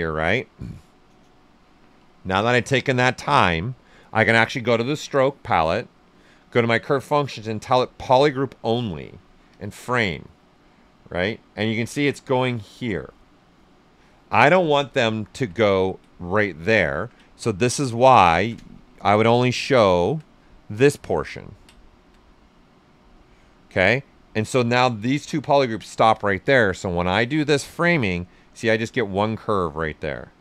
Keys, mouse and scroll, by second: 4.6 click, 4.6 typing, 9.4 click, 14.9 click, 15.0 alt+right click, 15.6 ctrl+right click, 16.9 ctrl+z, 17.2 right click, 18.3-20.4 ctrl+shift+drag, 20.4 right click, 21.0-26.6 alt+right drag, 26.6 click.